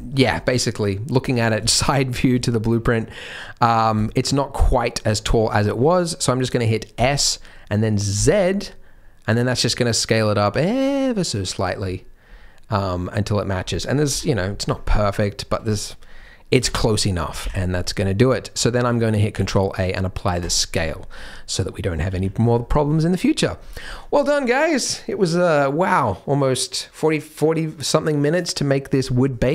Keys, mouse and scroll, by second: 1.6 shift+middle click, 2.6 shift+middle click, 3.8 scroll down 3, 4.1 shift+middle click, 4.9 shift+middle click, 5.3-6.9 scroll up 3, 6.9 s, 11.8-13.1 scroll down 4, 12.2-13.1 scroll up 1, 13.1 middle click, 13.1 scroll up 2, 14.0 KP_1, 14.7 scroll down 2, 14.9 shift+middle click, 16.5 KP_3, 17.4 KP_1, 18.3 shift+middle click, 19.3 ctrl+a, 20.9-21.5 scroll up 4, 21.5 middle click, 22.0 z, 22.4 scroll down 4, 22.5 middle click, 23.6-24.2 scroll down 1, 24.2-24.5 scroll down 1.